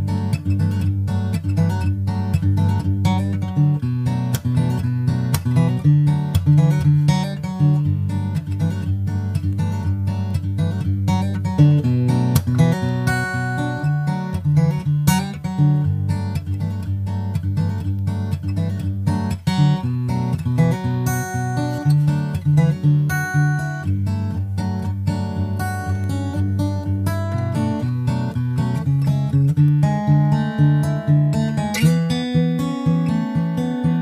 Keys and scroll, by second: 8.2 super+Right, 13.5 super+Right, 32.2 super+Right.